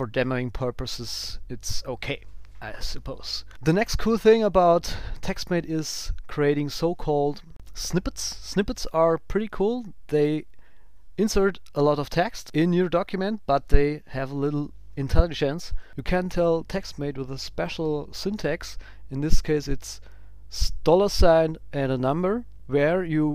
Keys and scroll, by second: 6.4 ctrl+alt+super+b, 14.3 shift+Right.